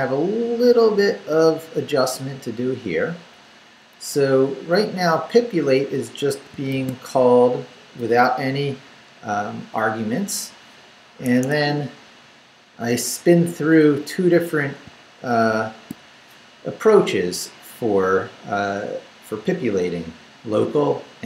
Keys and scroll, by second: 0.0 Down, 2.1 Up, 3.9 Up, 5.6 Up, 6.5 shift+Up, 6.7 shift+v, 11.3 Escape, 11.5 Down, 13.2 Down, 14.8 shift+Down, 15.5 shift+v.